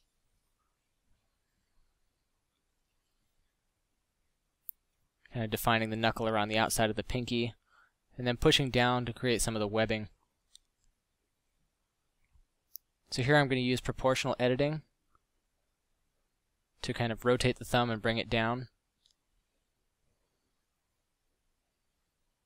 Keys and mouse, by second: 1.1 ctrl+z, 7.1 f, 9.7 Tab, 10.7 ctrl+Tab, 11.3 a, 11.4 c, 13.8 o, 14.4 r, 15.4 alt+o, 16.1 r, 17.7 g, 19.5 r, 20.9 g, 21.6 right click, 21.7 g.